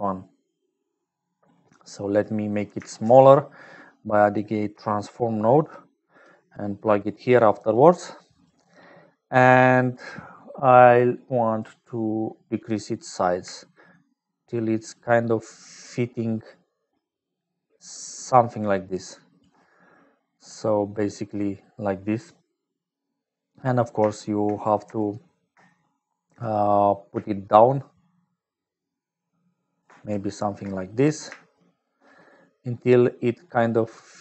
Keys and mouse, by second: 1.1 click, 2.2 click, 2.9 shift+a, 6.6 click, 7.7 click, 8.4 click, 8.9 click, 13.0-19.4 drag, 20.3 middle click, 27.1-29.7 shift+drag, 31.4 shift+click, 32.7-34.2 drag.